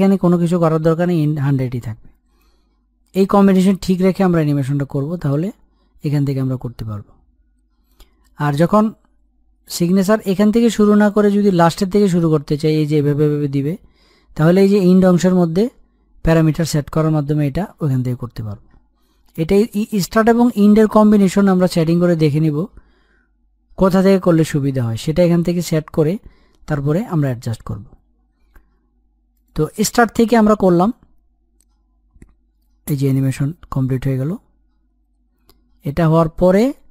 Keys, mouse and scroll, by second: 2.4-10.3 drag, 16.7-20.6 drag, 29.3-36.9 drag.